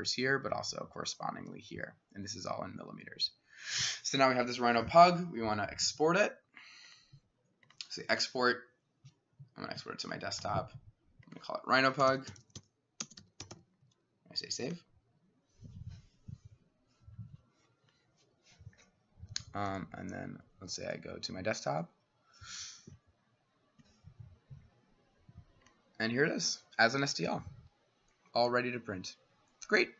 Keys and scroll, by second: 11.8-14.0 typing.